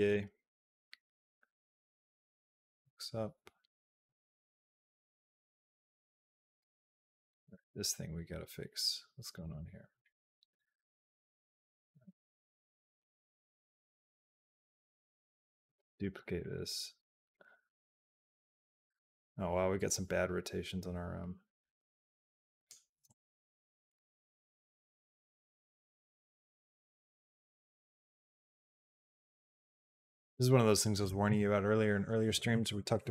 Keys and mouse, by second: 7.1 click, 9.1 click, 11.5 middle click, 12.2 middle click, 13.1-14.2 drag, 14.5 click, 14.8 shift+d, 16.2-22.5 drag, 22.8 g, 24.3-30.7 drag.